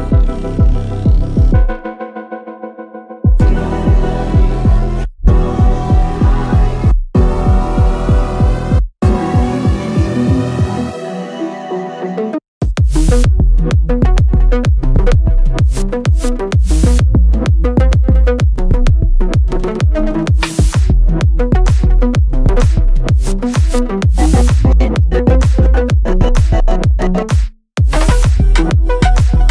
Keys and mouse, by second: 18.1 middle click, 18.3 middle click, 19.9 KP_0, 21.8 ctrl+middle click, 24.5-26.0 ctrl+middle drag, 27.3 KP_0, 28.0 middle click, 28.6 ctrl+middle click, 28.9 shift+middle click.